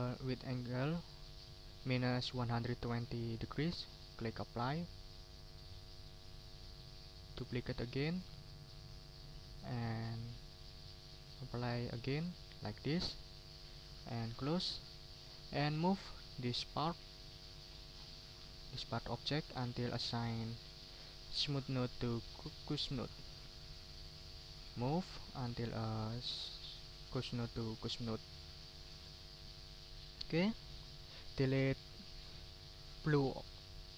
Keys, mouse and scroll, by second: 4.4 click, 5.4-6.6 drag, 7.3 right click, 8.2 click, 9.0 click, 12.0 click, 14.3 click, 15.1 click, 15.6 middle click, 16.3-17.8 drag, 17.9-18.2 ctrl+scroll up 2, 18.4 ctrl+click, 19.4-22.2 drag, 22.5 ctrl+scroll down 2, 22.9 ctrl+click, 25.2 ctrl+scroll up 2, 25.6-27.8 ctrl+drag, 27.9-28.2 ctrl+scroll down 2, 28.4 ctrl+click, 29.0 ctrl+click, 30.7 ctrl+click, 31.2 ctrl+scroll up 2, 31.7 ctrl+click.